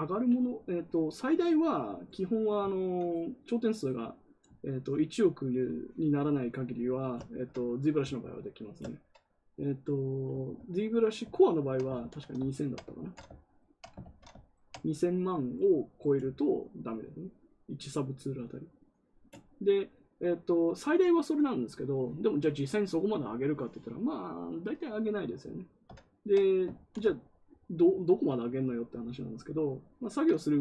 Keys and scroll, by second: 2.6 ctrl+z, 11.9 ctrl+z, 12.9 ctrl+z, 14.0 ctrl+z, 26.7 ctrl+z.